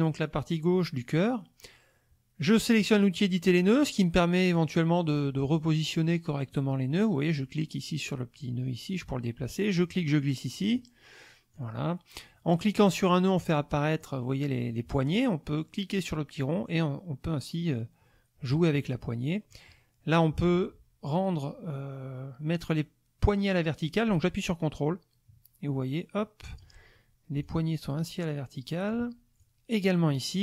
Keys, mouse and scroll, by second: 2.8 click, 4.5 click, 6.5 click, 7.6-9.1 drag, 9.9 click, 11.5-12.7 drag, 14.0-15.3 drag, 16.4-18.6 drag, 19.5-26.8 drag, 27.4-29.1 ctrl+drag, 29.4 ctrl+click.